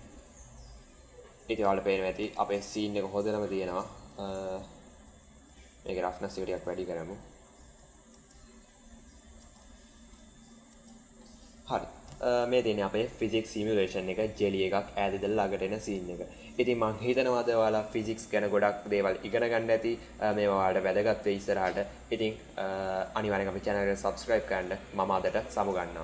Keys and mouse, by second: 2.2 space, 2.4 click, 5.5-7.6 drag, 8.1 space, 9.3 space, 9.4 drag, 10.6 space, 16.5 space.